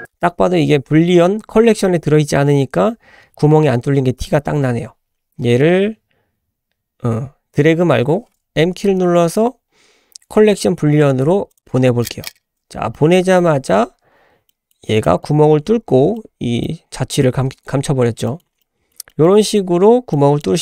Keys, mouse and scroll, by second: 1.8-4.2 scroll down 1, 4.2 scroll up 1, 5.0-5.3 scroll down 1, 5.5-7.3 scroll down 1, 9.0 m, 12.9 shift+middle drag, 13.5 scroll down 2, 14.5-15.3 middle drag, 14.5 scroll down 1, 15.3-16.1 scroll up 6, 16.1-16.6 middle drag, 17.4-18.0 scroll down 4, 18.2 shift+middle click, 18.6-18.9 middle drag, 19.1 shift+middle click, 19.4 shift+middle drag, 20.1 middle drag, 20.5 scroll up 1.